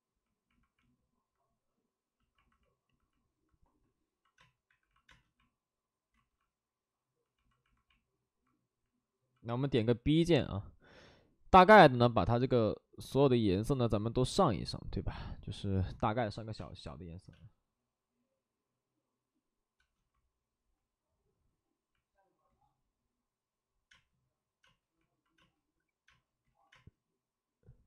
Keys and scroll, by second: 0.5 space, 4.3 space, 4.6 1, 5.0 space, 6.1 ctrl+z, 9.4 b, 9.8 p, 16.5 space, 19.8 space, 23.9 space, 24.6 space, 25.3 space, 26.4 ctrl+z, 26.4 space.